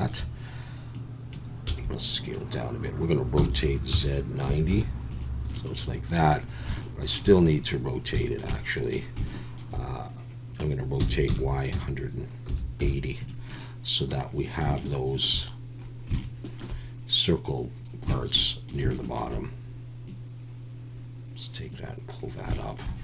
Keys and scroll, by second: 1.7 s, 3.3 r, 3.9 z, 4.4 9, 4.7 0, 11.0-12.8 typing.